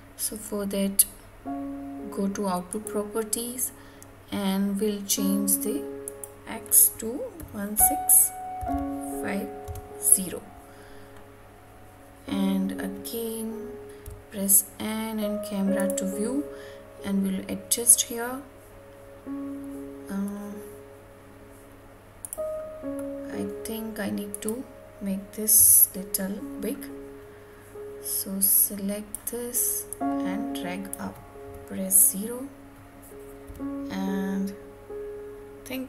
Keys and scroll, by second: 9.6 Return, 25.4 Tab.